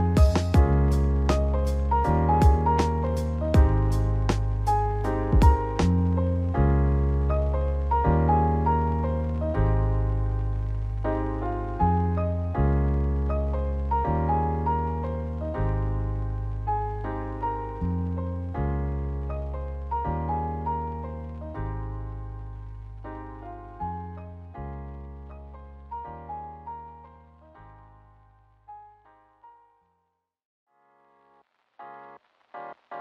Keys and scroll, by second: 5.5 3, 5.9 -.